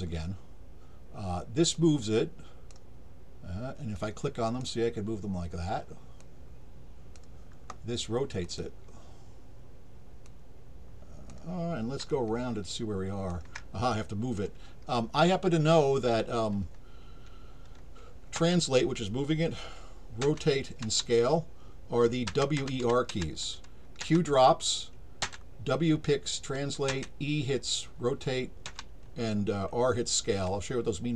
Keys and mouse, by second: 1.7 click, 3.9 click, 6.2 click, 8.4 click, 10.2-11.3 drag, 12.1-13.3 alt+drag.